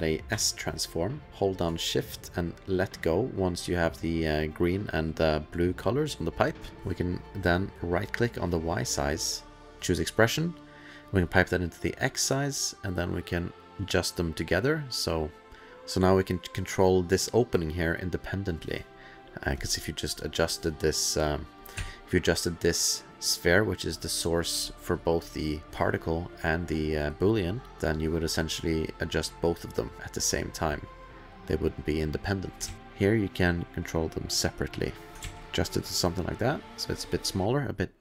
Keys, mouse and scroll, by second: 0.0-0.3 typing, 1.3 click, 1.6-6.3 shift+click, 2.2 shift+click, 2.3 shift+click, 6.8 click, 8.0 click, 9.8 click, 10.7 click, 13.3 click, 16.0 click, 19.8 click, 21.4 click, 21.7 1, 24.2 click, 25.1 middle click, 25.3 click, 25.5 middle click, 26.9 middle click, 27.3 middle click, 27.7 middle click, 27.8 click, 29.2 click, 32.7 ctrl+z, 33.2 click, 35.2 ctrl+s, 36.6 click, 36.7 click, 37.4 click.